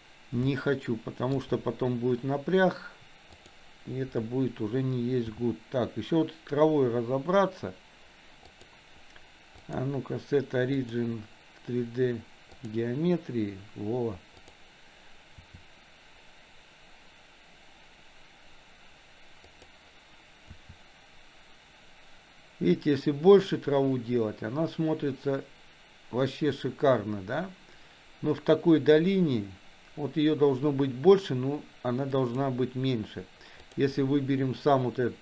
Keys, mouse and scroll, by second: 0.7-1.7 shift+middle drag, 3.4 click, 5.5 r, 9.8-13.1 drag, 15.6 r, 20.7 s, 33.7 click.